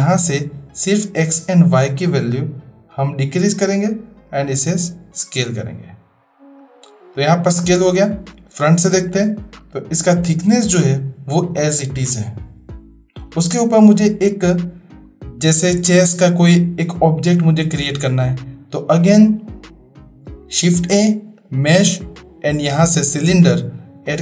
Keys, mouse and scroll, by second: 0.0-4.2 drag, 5.4-6.3 middle drag, 6.5 click, 8.4 click, 14.4-15.0 middle drag, 21.9 shift+a.